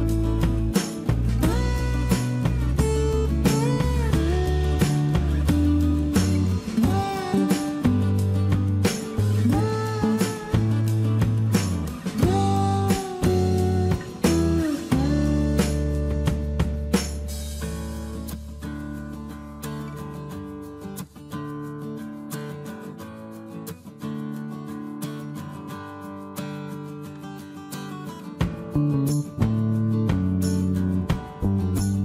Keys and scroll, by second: 14.6 space, 18.9 Escape, 30.3 space, 30.4 Escape.